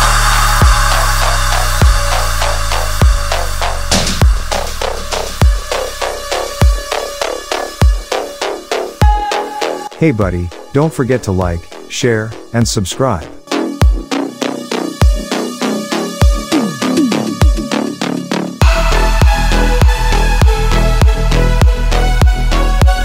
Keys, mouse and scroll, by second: 0.5-1.7 typing, 1.8 Down, 2.1 Return, 4.4 Return, 4.5 click, 8.6 click, 9.8 Right, 11.8 click, 15.7 ctrl+a, 16.4 click, 19.6 BackSpace, 20.3 Tab, 21.4-23.0 drag.